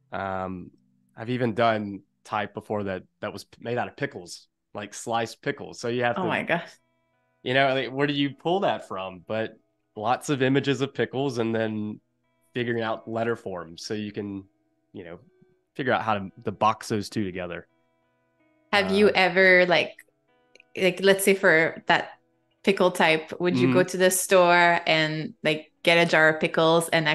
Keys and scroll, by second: 24.5 z, 25.9 a.